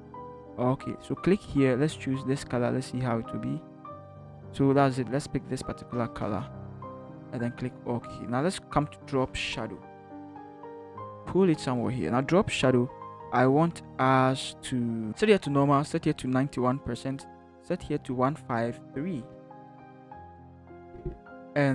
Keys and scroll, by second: 19.3-20.2 typing.